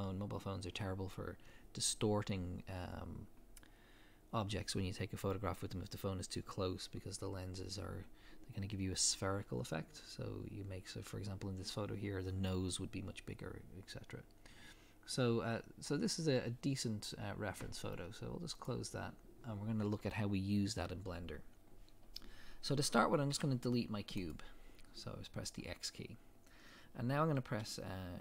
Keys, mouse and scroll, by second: 18.9-28.2 drag, 23.3 x.